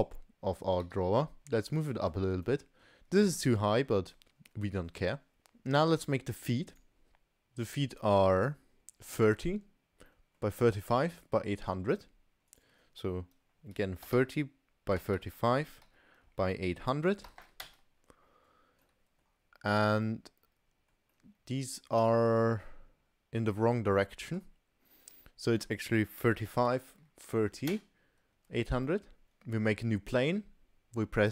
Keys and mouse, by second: 0.8 g, 2.4-3.0 middle drag, 4.2 middle click, 5.3 shift+a, 10.1 middle click, 12.6-18.3 drag, 17.4 0, 18.9-19.3 middle drag, 20.1-20.9 middle drag, 21.1-23.4 middle drag, 24.1 middle drag, 25.5-28.5 drag, 28.8 middle click, 29.2 g.